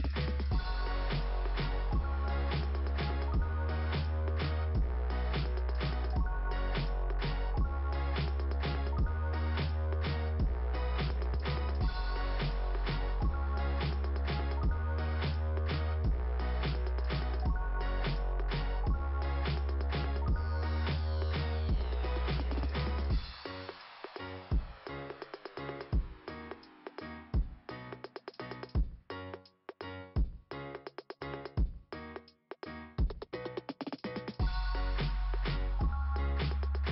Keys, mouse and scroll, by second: 2.3 right click, 4.4 click, 4.5 click, 4.7 click, 4.9 click, 5.0 click, 5.2 click, 6.6 right click, 6.6 right click, 7.1 click, 7.3 click, 9.1 click, 14.4 click, 16.3 click, 18.0 click, 19.1 click, 19.2 click, 20.2 click, 20.4 click, 22.1 click, 22.4 click, 26.0 click, 26.2 click, 28.8 click, 29.2 click, 34.2 click, 34.3 click, 34.9 click, 35.5 click.